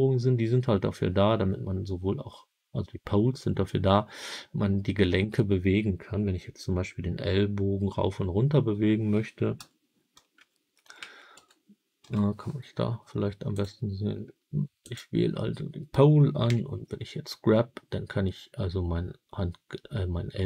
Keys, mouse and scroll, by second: 9.4 KP_3, 10.3 KP_1, 11.2 KP_3, 11.9 KP_1, 13.4 click, 14.7 click, 16.4 g.